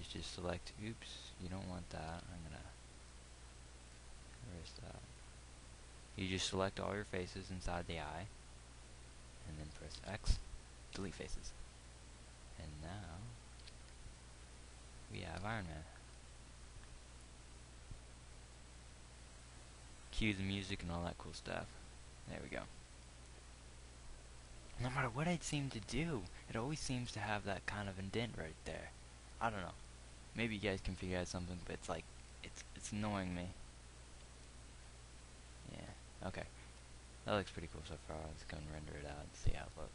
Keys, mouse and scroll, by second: 2.5 c, 3.4 c, 10.3 x, 11.7 x, 14.1 z, 15.9 Tab, 39.4 F12.